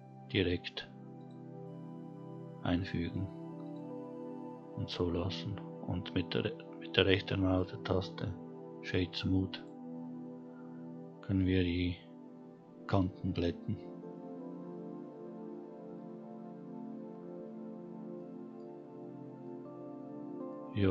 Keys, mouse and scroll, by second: 6.1-8.8 right drag, 8.8-9.2 scroll down 1, 9.7-10.5 scroll up 2, 10.5-11.4 scroll down 1, 16.4-16.7 scroll down 2, 16.8-17.2 middle drag, 17.6-18.1 scroll down 1, 18.1-19.2 middle drag, 19.4-20.5 scroll up 4, 19.8 middle drag, 20.5 middle drag.